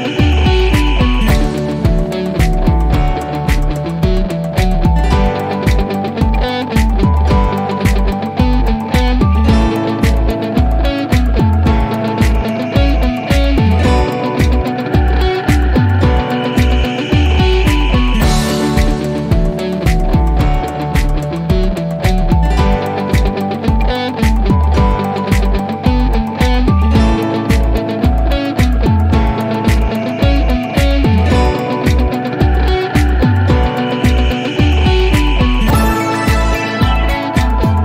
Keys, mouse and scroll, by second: 0.0 click, 2.4-4.7 drag, 5.1 scroll up 1, 5.7 click, 7.0 right click, 9.2-12.2 drag, 16.0 click, 19.5-20.3 drag, 21.7 right click, 22.5-23.0 click, 23.6 0, 24.1 Return, 25.5-26.0 click, 26.4 0, 26.7 Return, 28.1-31.1 drag, 32.0 p, 35.1 click, 36.9-37.8 typing.